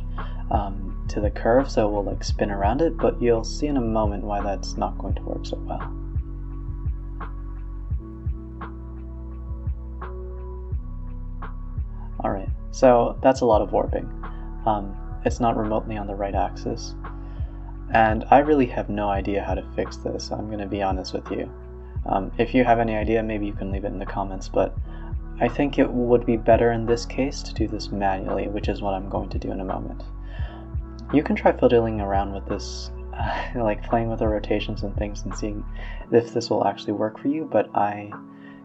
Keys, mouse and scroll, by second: 0.1 click, 1.0 middle click, 1.8-3.5 drag, 4.3-5.3 drag, 5.3 middle click, 5.7 scroll up 3, 6.0-7.2 middle drag, 7.2-8.9 drag, 10.8-12.8 drag, 12.8-13.4 scroll down 7, 13.4-14.5 middle drag, 14.5 alt+r, 14.7 alt+g, 15.3-15.9 scroll up 3, 15.9 click, 16.5-17.5 middle drag, 17.5 click, 17.9-18.6 scroll down 2, 18.6 alt+g, 18.8 Tab, 19.1 Tab, 19.4 scroll up 4, 19.6 a, 19.7 a, 20.0 click, 21.0 click, 21.7-22.3 drag, 22.7-23.0 middle drag, 23.0 r, 25.4 middle click, 25.9 r, 27.0 drag, 27.4-27.7 middle drag, 27.7 r, 29.0 click, 29.2 r, 31.0 KP_7, 31.4 r, 32.0-32.4 middle drag, 32.4 Tab, 32.7 a, 33.2 r, 34.5 Tab, 34.8-35.3 middle drag, 35.3 Tab, 35.6 middle drag, 35.8 Tab, 36.0 Tab, 36.3-36.9 middle drag, 36.9 Tab, 37.2 middle drag, 37.5 Tab, 37.8-38.6 middle drag.